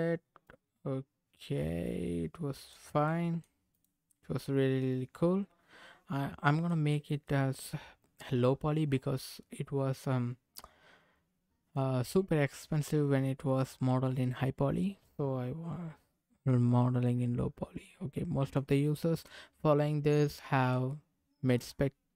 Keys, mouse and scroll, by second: 0.4-2.8 drag, 3.0 middle click, 3.7 click, 4.1-6.8 middle drag, 7.2-11.8 middle drag, 12.1-13.7 middle drag, 15.0-16.4 middle drag, 17.7 middle click, 19.2-20.8 middle drag, 21.4 click.